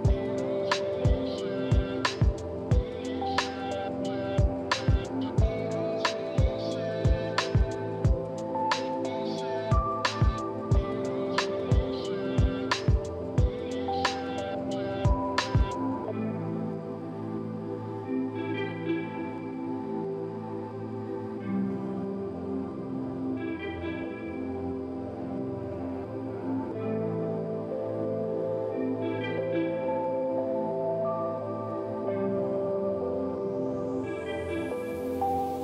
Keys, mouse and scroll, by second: 0.9 right click, 10.9-11.4 typing, 11.7 Return, 18.5 scroll up 2, 19.5-20.0 scroll down 3, 23.6 KP_5, 23.8 KP_0, 24.1 Return, 26.6 5, 26.7 Return, 27.7 middle click, 29.4-30.3 scroll up 3, 30.3-30.7 scroll down 2, 31.2 scroll down 1, 31.7 scroll up 2, 32.5-32.9 scroll up 1, 32.9 middle click, 33.0-33.5 scroll down 2, 34.2 scroll up 1, 34.5-35.2 scroll down 2.